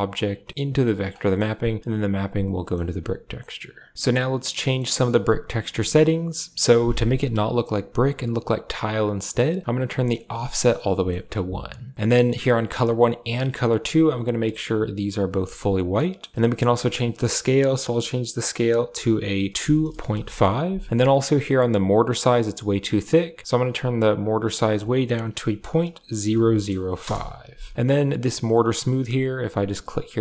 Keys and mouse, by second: 0.4 middle click, 0.7 click, 1.1 middle click, 1.5 click, 2.2 click, 2.5 middle click, 3.9 ctrl+w, 5.4 middle click, 9.6 click, 10.7-11.0 middle drag, 12.3 click, 13.5 click, 15.1 click, 15.8 middle click, 16.3 middle click, 16.8-26.8 drag, 26.2 0, 29.5 click.